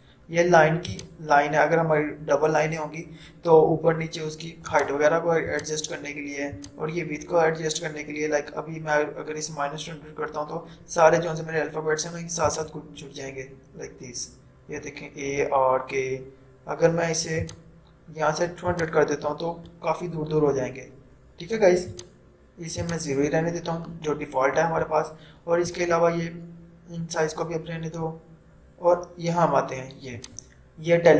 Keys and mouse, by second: 3.4 typing, 4.9 click, 9.1 typing, 12.5 click, 17.5 click, 21.2-22.1 typing, 22.1 click, 30.1 click, 30.1-31.0 typing.